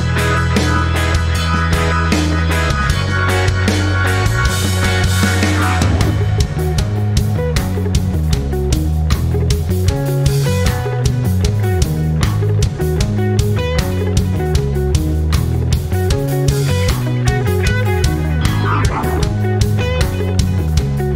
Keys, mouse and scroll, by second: 6.9 ctrl+scroll up 1, 7.7 click, 9.6-13.5 shift+drag, 13.5 ctrl+scroll down 1, 16.2 click.